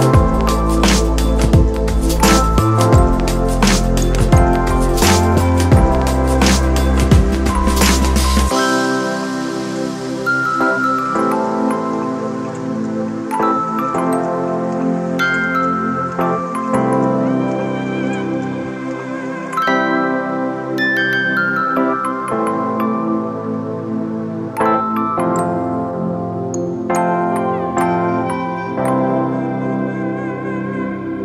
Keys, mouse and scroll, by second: 0.6 ctrl+click.